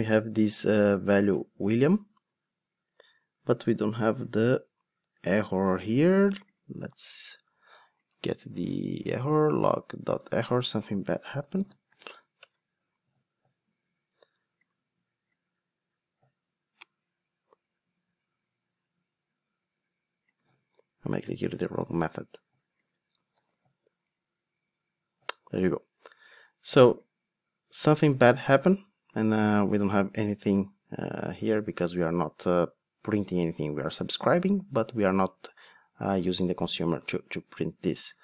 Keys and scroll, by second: 11.4 super+f, 23.4 ctrl+shift+d.